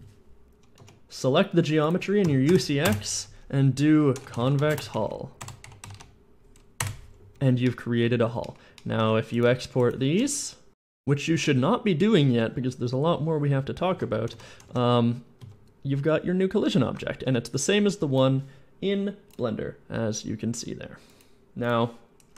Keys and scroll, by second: 0.0 Return, 0.0 r, 0.0 shift+t, 0.0 n, 0.6 Tab, 0.8 Tab, 2.1-6.0 typing, 6.7 Return, 8.9 Tab, 14.4-15.3 typing, 16.4 a, 17.1 a, 22.2 a.